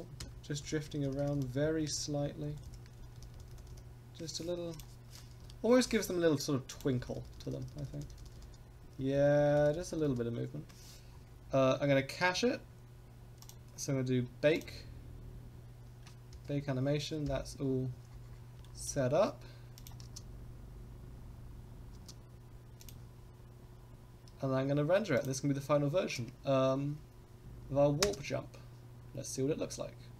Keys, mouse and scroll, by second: 0.2 KP_0, 0.6 Right, 0.8 Right, 1.0 Right, 1.2 Right, 1.3 Right, 1.6 Left, 1.8 Left, 2.0 Left, 2.1 Left, 2.3 Left, 2.4 Left, 2.5 Left, 2.7 Left, 3.0 Right, 3.2 Right, 3.3 Right, 3.5 Right, 3.7 Right, 4.7-5.9 drag, 6.7 click, 7.0 Right, 7.2 Right, 7.4 Right, 7.5 Right, 7.7 Right, 7.9 Right, 8.0 Right, 8.2 Right, 8.4 Right, 8.8 Left, 9.0 Left, 9.2 Left, 9.4 Left, 9.6 Right, 9.7 Right, 9.9 Right, 10.1 Right, 11.1-11.5 scroll down 4, 12.6 scroll up 2, 13.4 click, 14.5 click, 16.4 KP_0, 17.3 KP_0, 17.7-18.2 scroll down 4, 18.6 shift+middle drag, 19.8 click, 20.0 space, 21.9 space, 22.8 click, 25.1 click, 27.4 space, 28.0 space.